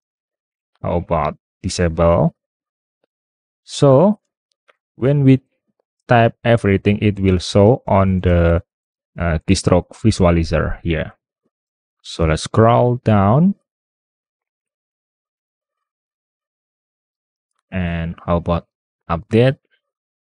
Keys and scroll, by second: 5.0-8.5 typing, 11.9 super+w, 16.7 super+Tab.